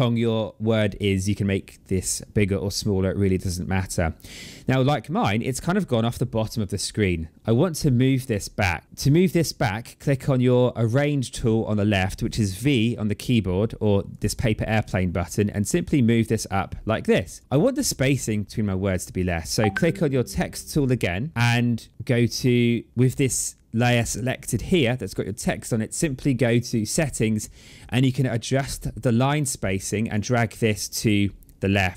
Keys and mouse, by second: 13.9 click, 15.7 click, 20.2 click, 26.5 click, 28.4 click, 30.4 click, 31.5 click.